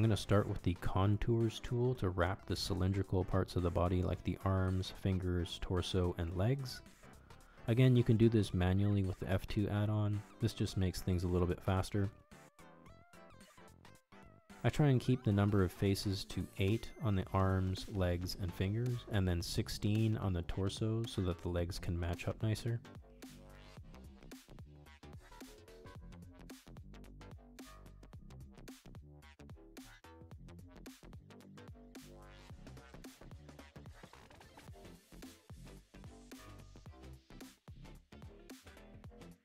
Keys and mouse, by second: 16.8-25.0 middle drag.